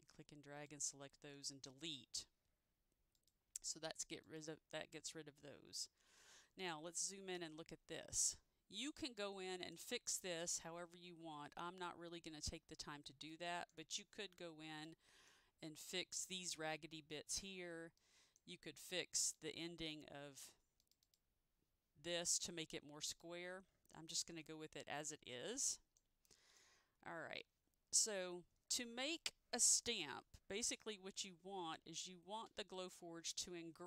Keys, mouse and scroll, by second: 0.1 click, 1.4 Delete, 3.3 Delete, 4.4 click, 5.8-6.2 scroll up 1, 6.6-7.0 scroll down 1, 8.4 middle click, 9.3 middle click, 10.3 middle click, 15.0 middle click, 17.6-17.9 scroll down 1, 18.1 middle click, 21.2 click, 25.7 middle click, 26.4 middle click.